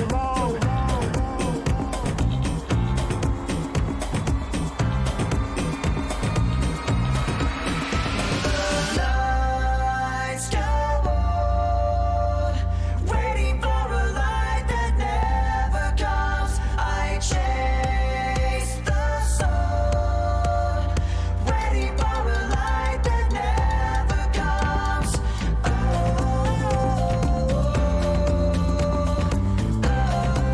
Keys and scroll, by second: 3.1 w, 6.9 w, 7.3 d, 8.0 w, 8.3 s, 12.0 w, 12.5 s, 17.5 w, 18.7-20.3 typing, 22.5 a, 24.2-25.1 typing.